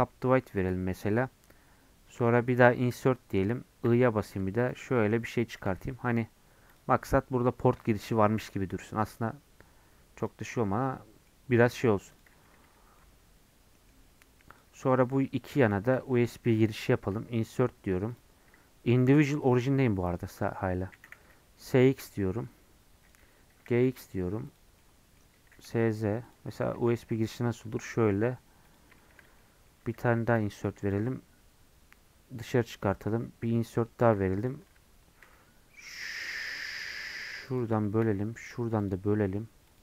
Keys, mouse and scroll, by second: 0.7-2.9 right drag, 2.9 i, 5.7 Tab, 5.8-6.4 scroll down 5, 6.7 click, 7.0 scroll up 2, 9.7 scroll down 2, 10.4 middle click, 11.3 scroll up 3, 11.5 middle click, 12.1 click, 12.4 scroll up 1, 12.6 Tab, 13.0-14.6 middle drag, 14.6 click, 17.1 i, 20.2 click, 21.0 s, 23.6 g, 24.8 middle click, 25.5 s, 29.0 shift+middle click, 29.2 scroll up 1, 29.4-30.4 middle drag, 30.4 i, 35.2 ctrl+r, 37.8 shift+middle click, 38.4 ctrl+r.